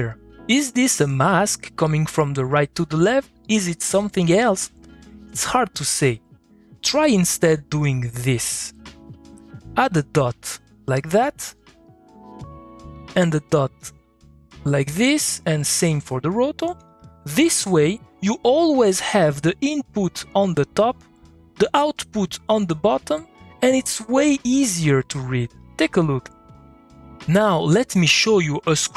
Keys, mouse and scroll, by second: 6.2 middle click, 6.2 click, 7.3 middle click, 8.0-10.9 drag, 10.9 middle click, 11.4-12.9 drag, 13.5 ctrl+click, 18.3 middle click, 24.4 middle click, 24.8 click, 25.1 middle click, 25.6 click, 25.8 middle click.